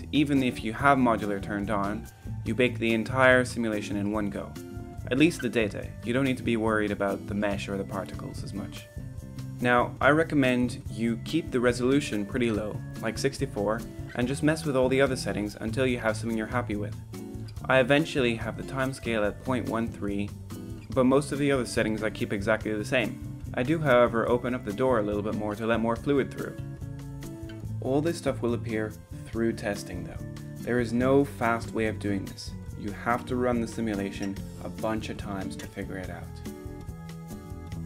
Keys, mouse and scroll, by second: 4.5-14.3 drag, 14.5-16.8 middle drag, 21.3 click, 21.9-22.2 middle drag, 23.0-23.8 drag, 23.8-24.6 middle drag, 25.1-26.0 drag, 27.4 click.